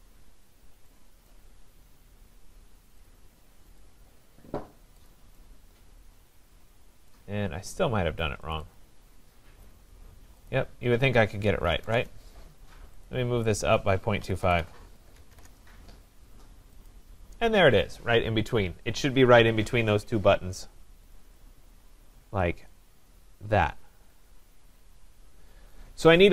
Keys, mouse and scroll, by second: 1.3 right click, 1.5 scroll, 3.1 click, 3.8 click, 4.3-4.6 scroll, 5.1 click, 5.9 middle click, 7.1 right click, 8.5 click, 8.8 click, 10.5 click, 11.3-12.3 typing, 13.0 click, 14.0-15.1 typing, 15.3 Return, 16.9 click, 21.2 click, 21.4 click, 21.9 scroll, 22.4 click, 25.7 right click, 26.2 scroll.